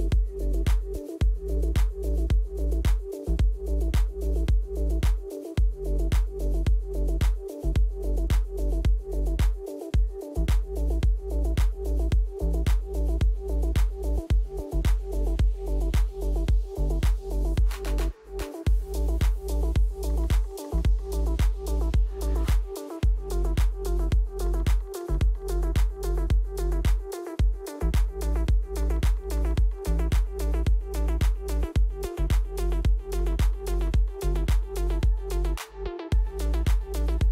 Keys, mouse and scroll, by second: 2.4 middle click, 3.6 middle click, 4.8 click, 5.2 alt+click, 5.3 alt+click, 7.6 right click, 8.0 click, 9.3 ctrl+c, 9.3 ctrl+v, 10.5 right click, 10.7 click, 12.3 Delete, 12.3 click, 13.3 right click, 17.3 right click, 17.5 click, 19.0 right click, 19.4 click, 21.1 click, 23.1 right click, 25.8 click, 26.3 click, 28.5 right click, 31.6 click, 32.6 click, 33.7 Tab, 33.7-35.4 typing, 35.9 Return.